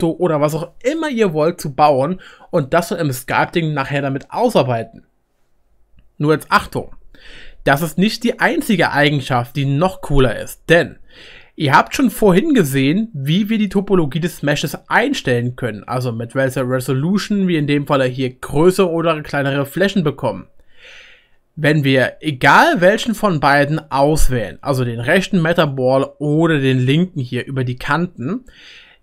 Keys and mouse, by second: 22.3-26.9 middle drag, 26.8 click.